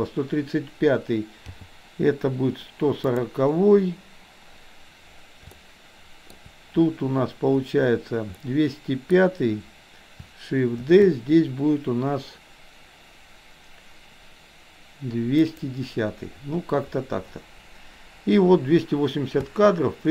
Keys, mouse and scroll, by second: 1.4 g, 5.6 shift+middle click, 8.4 middle click, 10.8 shift+d, 19.4 space.